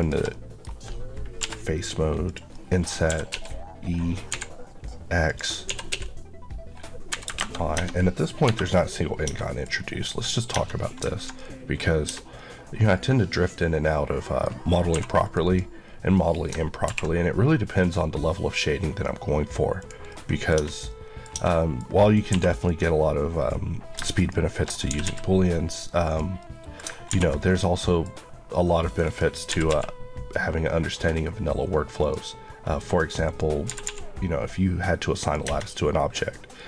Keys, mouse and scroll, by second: 0.2 middle click, 1.3 i, 2.1 click, 2.4 middle click, 2.9-4.1 typing, 5.1 click, 5.5 typing, 7.0 y, 7.1 KP_0, 7.2 KP_Enter, 7.6 Tab, 8.3 KP_Divide, 9.1 Tab, 9.2 middle click, 9.5 scroll up 1, 9.9 middle click, 10.4 Tab, 10.6 middle click, 11.9 Tab, 12.0 middle click, 14.8 2, 15.0 click, 15.3 Left, 16.0 middle click, 16.7 ctrl+b, 17.4-18.6 scroll up 1, 18.6 scroll up 1, 19.6 click, 20.0 middle click, 20.4 Tab, 20.7 middle click, 21.2 Tab, 21.4 middle click, 22.1 2, 22.5 click, 24.8 g, 25.9 click, 26.3 middle click, 26.9 ctrl+r, 27.2 click, 27.4 right click, 27.6 middle click, 28.7 click, 29.3 typing, 31.9 click, 33.5 typing, 35.1 click, 35.5 middle click.